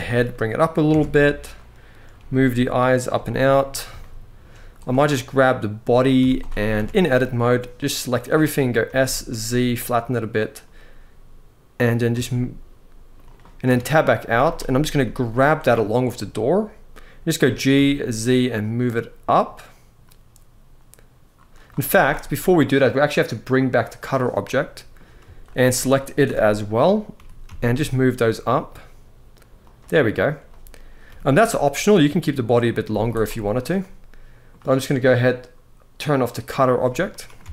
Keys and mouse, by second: 0.6 Tab, 1.9 g, 2.9 z, 3.7-4.1 shift+middle drag, 6.5 Tab, 6.5 z, 7.5 click, 8.5 s, 8.8 z, 10.1 click, 11.5 g, 11.8 z, 12.9 right click, 13.5 Tab, 13.9 z, 14.7 z, 15.4-15.8 drag, 17.1 g, 17.5 z, 21.6 z, 24.2-24.6 middle drag, 25.1 shift+click, 25.9 KP_1, 26.8 g, 27.2 z, 29.4 click, 30.2-30.6 drag, 30.8 g, 31.1 z, 32.4 click, 32.6 z, 33.5-34.2 middle drag, 36.3 click, 36.8-37.1 middle drag, 37.2 alt+a, 37.4-37.5 middle drag.